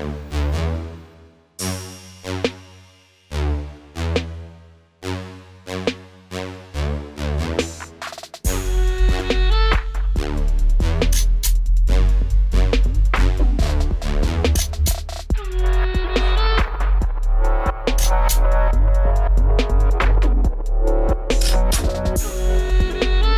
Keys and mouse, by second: 0.6 w, 1.4 b, 2.1 w, 6.4 click, 7.0 middle click, 7.5 right click, 7.5 w, 8.9 right click, 9.2 w, 10.0 middle click, 11.6 a, 11.9 b, 12.6 w, 13.2 w, 16.5 w, 17.3 w, 18.8 click, 20.1 w, 21.7 middle click, 22.1 w, 23.2 middle click.